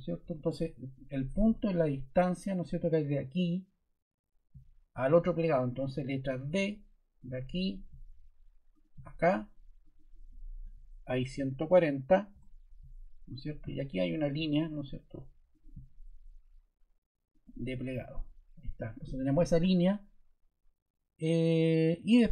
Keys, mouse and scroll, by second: 6.4 d, 8.7 click, 9.8 click, 10.3-11.8 typing, 12.3 Return, 18.0 ↺.